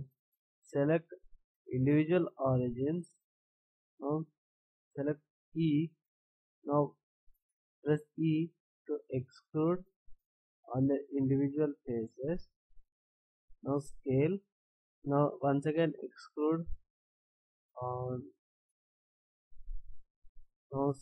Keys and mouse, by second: 8.0 e, 13.7 s, 16.0 e, 20.7 ctrl+s.